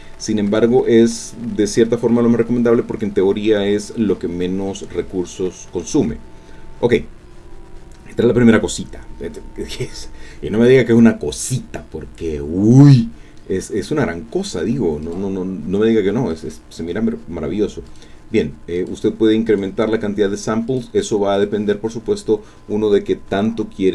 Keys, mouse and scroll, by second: 0.5 click, 15.0 click, 16.3 click, 17.9 click, 18.8 click, 19.5 click, 20.7 click, 21.3 click.